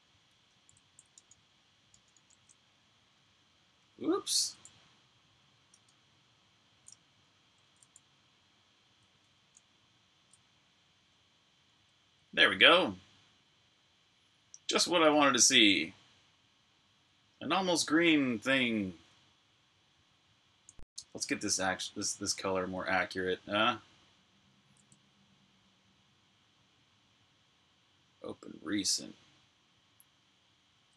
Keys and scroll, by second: 1.0 super+Tab, 4.3 super+Tab, 21.0 super+Tab.